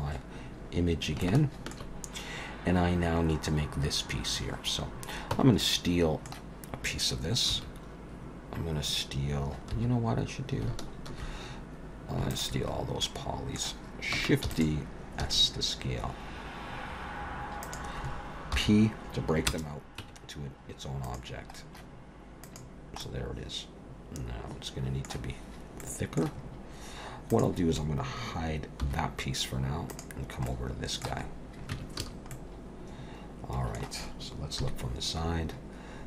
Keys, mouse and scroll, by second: 0.5-1.0 scroll up 3, 1.2 shift+middle click, 5.3 Tab, 5.6 middle click, 7.5 2, 9.7 3, 12.3 alt+shift+click, 12.7 scroll down 3, 13.0 middle click, 14.5 shift+d, 15.2 s, 18.6 p, 20.0 Tab, 21.0 click, 22.4 click, 23.0 middle click, 25.3-25.8 scroll up 3, 25.8 middle click, 27.3 click, 28.8 h, 29.9 click, 30.5 middle click, 31.2-32.0 scroll up 2, 31.7 Tab, 32.0 a, 32.3 middle click, 34.6 KP_3, 35.4-36.0 scroll up 1.